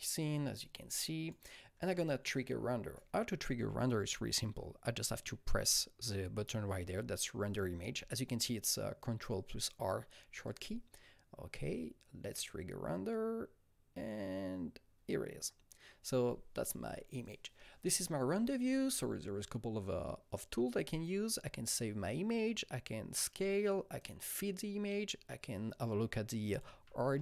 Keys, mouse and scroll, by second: 0.7-4.4 alt+drag, 10.5-17.2 alt+drag, 17.2-23.2 alt+drag, 23.2 click, 24.0 click, 26.6-27.2 typing.